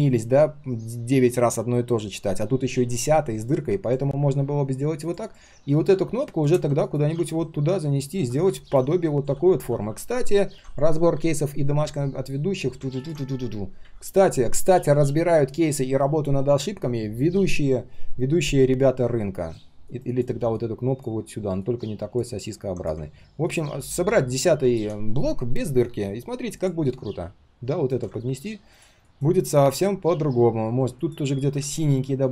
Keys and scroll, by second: 10.5 ctrl+a, 10.5 ctrl+shift+v.